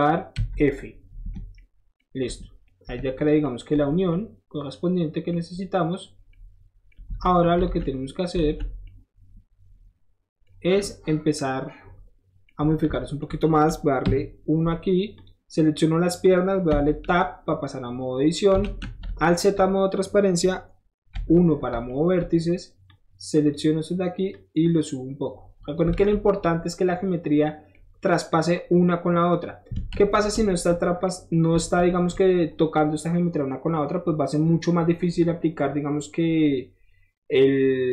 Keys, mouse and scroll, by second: 2.8 Tab, 3.2 click, 6.3 middle click, 7.2 alt+z, 7.6 alt+z, 7.9 middle click, 8.3 alt+z, 8.4 alt+z, 8.8-11.1 middle drag, 12.5 middle drag, 12.7 Tab, 14.0 KP_1, 15.2 click, 15.7 middle click, 16.1 middle click, 16.8 Tab, 17.2 middle click, 18.1 middle click, 18.3 middle click, 18.6 alt+z, 19.0 middle drag, 21.1 1, 21.7 shift+1, 22.9-23.5 drag, 24.3-25.8 drag, 26.0 alt+z, 26.2 scroll down 1, 26.3-27.8 middle drag, 27.8 middle click, 29.9 ctrl+z, 31.0 middle click, 31.9 shift+middle click, 32.6-34.6 shift+middle drag, 34.8-35.2 scroll down 2, 35.7 scroll up 1.